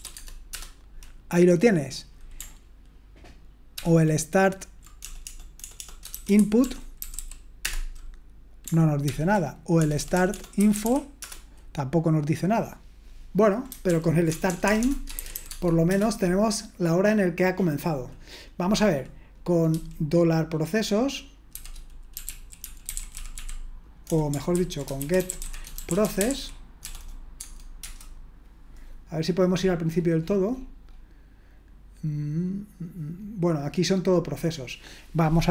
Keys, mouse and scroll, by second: 0.5 Tab, 3.7 ctrl+p, 5.0-7.6 typing, 9.0 ctrl+p, 9.8-11.3 typing, 13.9 ctrl+p, 14.3-15.8 typing, 15.9 Return, 21.5-26.8 typing, 24.5 ctrl+w, 27.3 Tab, 27.8 Return, 29.2-34.2 scroll up 1, 34.2-34.8 scroll up 1, 34.8-35.5 scroll up 1.